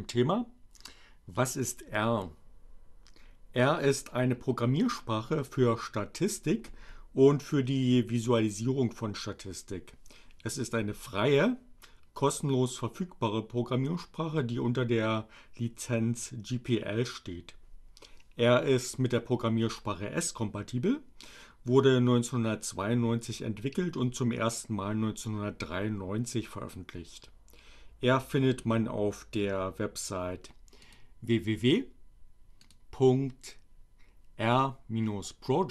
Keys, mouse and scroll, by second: 29.7 click, 32.6 click.